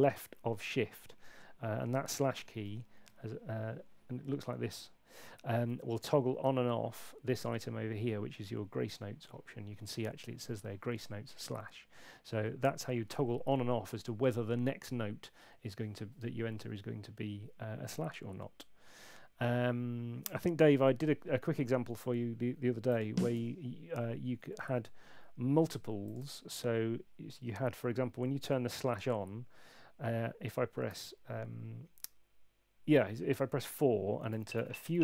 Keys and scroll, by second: 23.3 r, 24.6 super+z, 30.9 4.